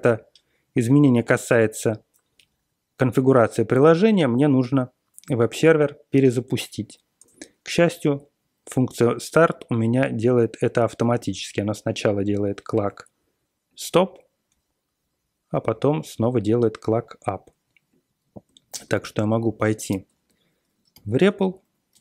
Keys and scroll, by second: 7.9-8.3 Up, 8.6 Up, 9.5-9.9 Left, 10.0 Left, 10.2 Down, 10.9 Right, 11.1 Right, 18.7 ctrl+o, 18.9 r, 19.9 alt+shift+., 20.9-22.0 typing.